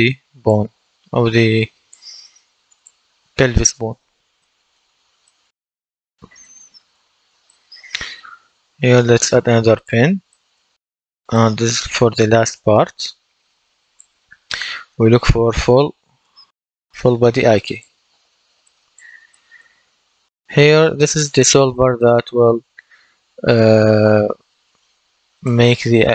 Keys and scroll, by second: 14.7-16.9 typing.